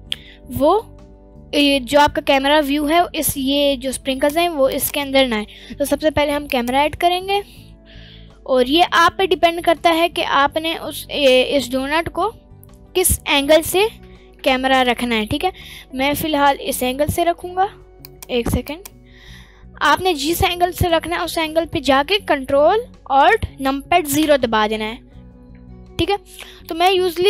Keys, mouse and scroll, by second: 4.1 click, 4.7 click, 5.4 shift+a, 6.8-7.7 scroll down 2, 7.2 middle click, 8.3-9.3 middle drag, 8.3-8.7 scroll up 2, 9.8-11.0 middle drag, 11.3-12.2 scroll down 2, 11.6-13.1 middle drag, 14.4 ctrl+alt+KP_0, 16.6 middle click, 18.0 click, 18.6 click, 18.9-21.2 drag, 24.1 ctrl+alt+KP_0, 25.2 scroll up 1, 26.7 click, 26.7 scroll up 1.